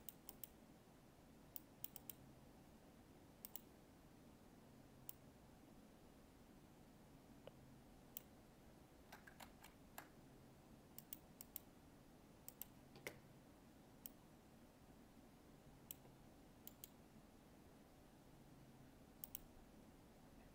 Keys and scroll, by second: 9.5 ctrl+z.